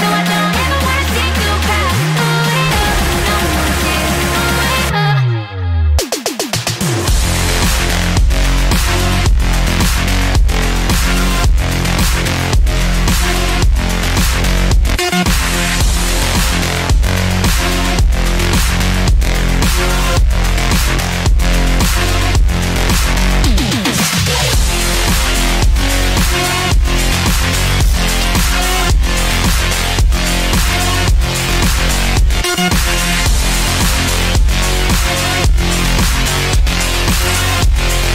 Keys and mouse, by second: 1.7 Delete, 6.1-11.3 middle drag, 12.2 KP_3, 14.3 click, 18.3 c, 23.1 c, 26.0 Delete, 30.5 c, 32.3 KP_3, 33.8 c, 36.9 e.